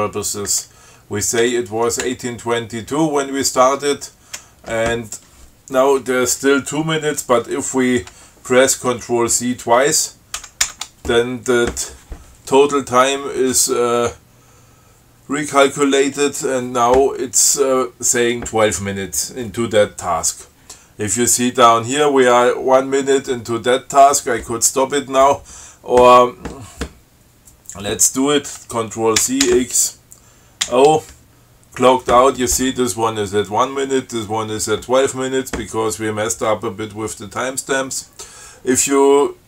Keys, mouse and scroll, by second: 1.7 2, 2.3 Delete, 2.7 Right, 10.7 ctrl+c, 29.4 ctrl+c, 29.7 ctrl+x, 30.9 ctrl+o.